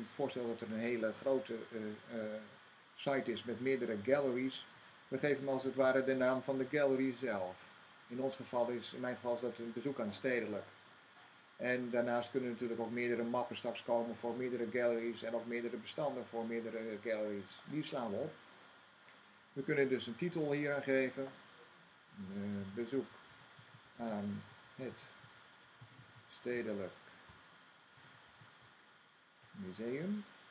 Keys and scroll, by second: 4.4-7.0 typing, 21.6-26.5 typing, 27.8-30.5 typing.